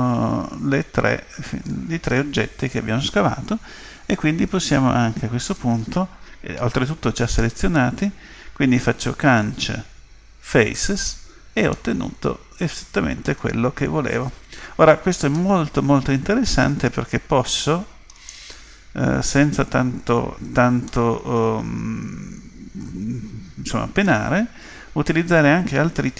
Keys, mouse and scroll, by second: 9.2 Delete, 11.7-13.6 middle drag, 15.4-17.2 middle drag, 20.9-22.6 middle drag.